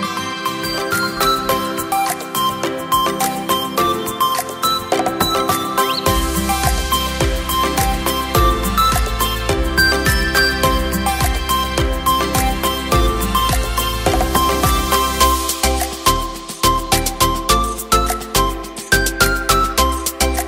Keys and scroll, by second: 9.4 space, 15.7 Up, 15.8 Up, 16.0 Up, 16.1 typing.